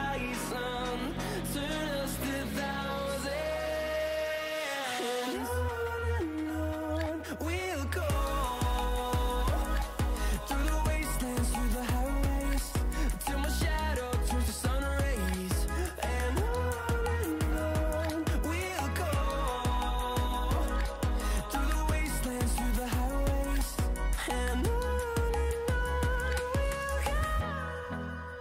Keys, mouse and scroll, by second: 0.9 ctrl+z, 1.4 click, 5.2 scroll up 1, 7.9-8.4 typing, 8.4-9.7 drag, 12.2-17.3 drag, 17.3 scroll down 1, 18.0 scroll up 1, 18.0 typing, 19.7-25.9 drag, 27.4-27.9 scroll down 1.